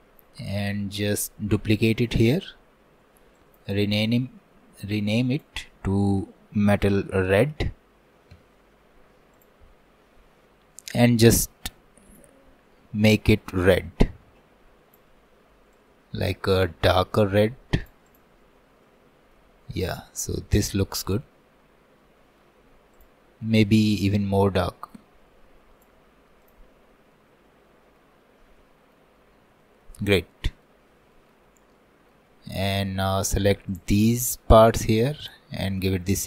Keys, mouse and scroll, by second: 9.8-10.5 scroll up 9, 10.5 middle click, 11.0 scroll up 3, 11.3 middle click, 12.1 click, 18.1 click, 18.4-18.9 scroll up 3, 18.9 middle click, 19.5 scroll up 1, 19.8-21.0 middle drag, 21.0 scroll up 1, 21.2-23.0 middle drag, 23.0-25.2 drag, 26.5 click, 26.7-27.2 scroll down 4, 27.2-28.2 middle drag, 28.2-28.6 scroll down 2, 28.6 middle click, 29.1-29.6 scroll up 3, 29.6 shift+middle click, 30.1 scroll up 1, 30.3 middle click, 30.8-31.2 scroll down 3, 31.2 shift+middle click, 31.5 scroll up 1, 31.8-33.7 middle drag, 33.7-36.2 drag.